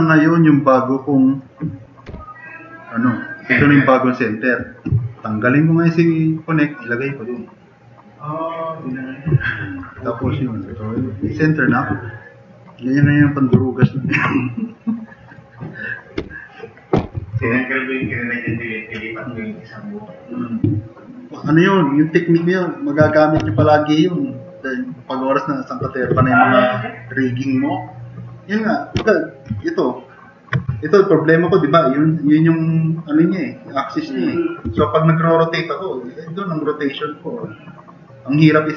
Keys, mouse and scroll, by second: 2.1 Delete, 3.6 middle click, 9.4 middle drag, 10.4 drag, 10.9-13.4 drag, 13.9 ctrl+z, 16.2 Delete, 17.6 drag, 18.5-19.1 drag, 34.6 r.